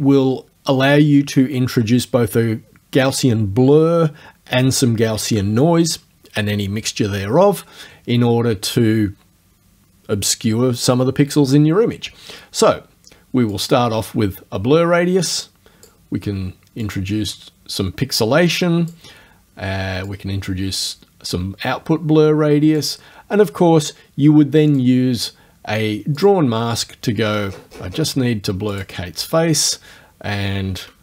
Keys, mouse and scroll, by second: 13.6 click, 16.8-19.1 drag, 20.1-23.0 drag, 24.7 click, 26.2 click, 27.2-28.2 scroll down 1, 28.8 click.